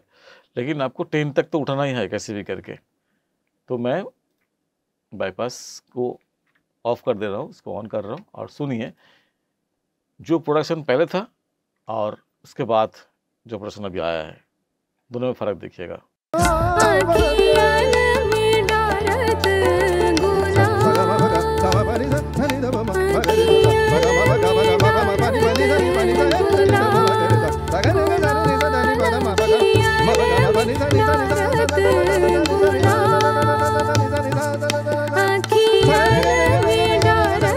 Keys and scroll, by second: 16.2 space.